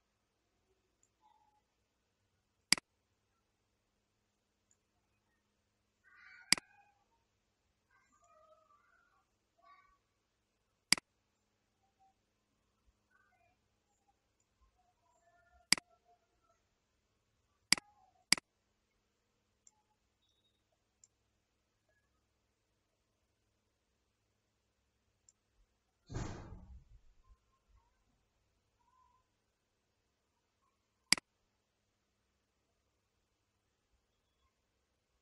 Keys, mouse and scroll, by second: 2.6 click, 6.5 click, 10.9 click, 15.8 click, 17.7 click, 18.4 click, 19.7-22.4 middle drag, 22.4 scroll down 1, 23.0-23.3 scroll down 1, 23.6-25.4 scroll up 1, 25.4-27.3 middle drag, 27.3-28.3 scroll down 2, 28.9-31.0 scroll up 1, 31.0 click.